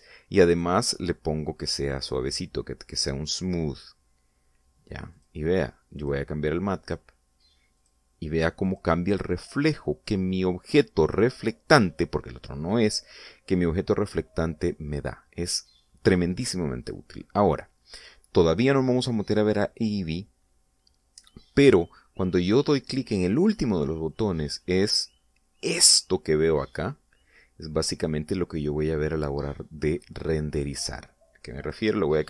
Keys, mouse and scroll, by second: 1.5 right click, 2.6 click, 6.1 click, 7.0 click, 7.8 click, 8.7 click, 9.6 click, 25.1 click, 26.5 scroll down 1, 27.0-29.2 middle drag, 29.5 scroll down 1, 30.2 scroll up 1, 30.9 middle click.